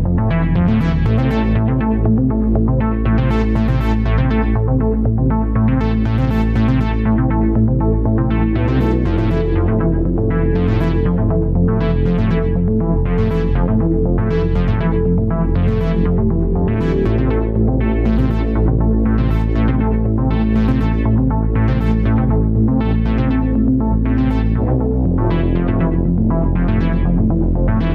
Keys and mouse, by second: 0.4 ctrl+z, 0.6 ctrl+z, 2.0-3.1 middle drag, 6.5 alt+z, 9.8 Tab, 10.4 Tab, 12.7 alt+z, 13.4 s, 15.9 Tab, 18.6-19.9 middle drag, 21.2-22.5 middle drag, 22.6 Tab.